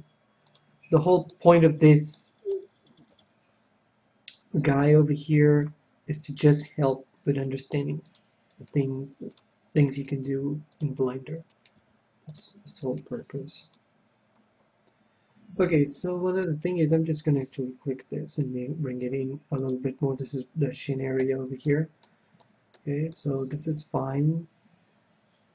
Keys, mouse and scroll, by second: 0.1 g, 1.1-2.5 drag, 1.1-4.0 middle drag, 1.1 right click, 3.4 KP_3, 5.2-6.6 middle drag, 6.1 KP_1, 6.9-8.7 right drag, 7.7 g, 8.7-11.6 drag, 9.1-11.6 right drag, 9.3 g, 10.7 g, 12.2 g, 13.6-15.8 drag, 13.6-15.0 right drag, 13.7 g, 16.9-18.7 right drag, 17.9 g, 20.2-21.8 drag, 21.7 a, 22.1-25.2 middle drag.